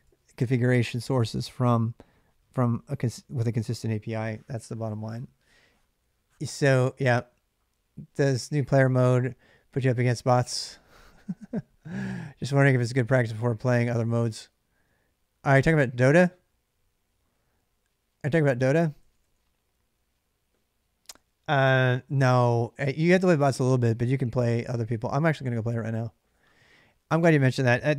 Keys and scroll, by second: 18.4 j, 18.6 j, 19.0 j.